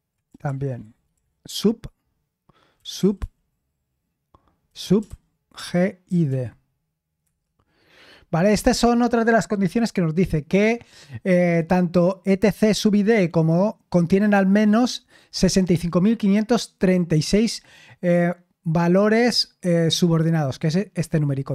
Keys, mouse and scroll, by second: 0.2 BackSpace, 0.4 BackSpace, 0.6 BackSpace, 0.8 BackSpace, 2.5-3.6 typing, 4.8-6.7 typing, 7.2 Return, 21.0-21.5 drag.